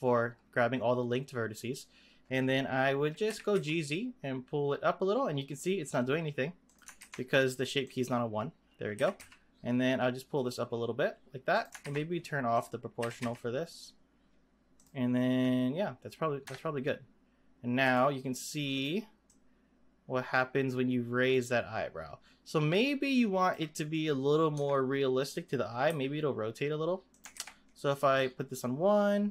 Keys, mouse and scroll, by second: 3.3 g, 6.9 ctrl+z, 7.8-8.9 drag, 8.9 g, 11.8 ctrl+z, 12.5 click, 13.0 g, 16.4 Tab, 17.8 click, 18.7 click, 19.2-22.2 drag, 24.5 Tab, 25.9 r, 27.3 ctrl+z, 28.0-29.3 drag.